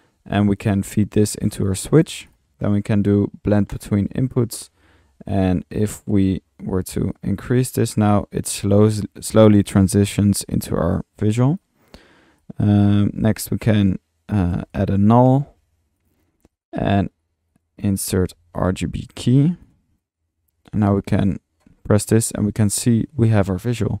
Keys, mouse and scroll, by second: 0.6-1.8 drag, 2.3-2.8 drag, 3.7-4.3 drag, 7.1-11.8 drag, 11.8-12.2 drag, 12.4-13.1 drag, 13.5-14.0 drag, 14.7 Tab, 14.7-15.6 typing, 15.2 drag, 16.0-16.8 drag, 16.5-16.8 right drag, 17.1 right click, 17.1 click, 17.2 right drag, 17.5 click, 17.6 right click, 17.9 click, 18.3 typing, 19.5 click, 20.0 click, 20.9 click, 21.4 click, 22.4 click, 22.8 click.